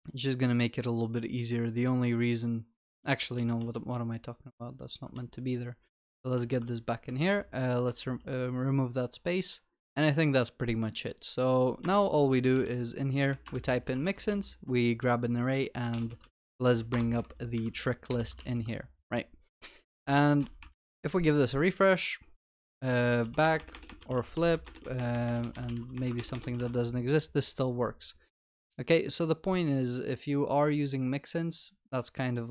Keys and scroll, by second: 3.1 ctrl+z, 6.3 ctrl+z, 6.4 ctrl+s, 13.5 Return, 18.4 ctrl+s.